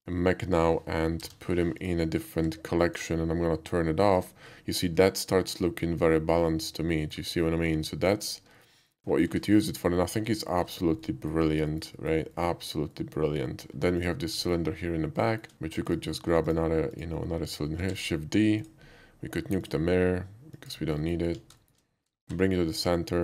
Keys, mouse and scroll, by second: 1.3 m, 1.8 click, 2.4 1, 2.9 click, 4.2 click, 4.8-7.2 middle drag, 8.0 click, 8.6 alt+middle click, 8.8 alt+middle click, 9.2 alt+scroll up 1, 9.5 shift+middle click, 10.1 shift+middle click, 10.4 shift+middle drag, 11.0-11.3 shift+middle drag, 11.7 alt+middle click, 12.0 alt+middle click, 12.4 alt+middle click, 12.9 alt+middle drag, 13.9 alt+click, 14.4 alt+middle click, 15.2 alt+middle drag, 15.3 shift+middle click, 15.8 shift+click, 16.5 shift+click, 16.9 shift+click, 18.0 shift+d, 18.6 click, 19.6 click, 20.6 click, 21.0 middle click, 21.6 shift+middle drag, 22.3 shift+s, 23.0 shift+s.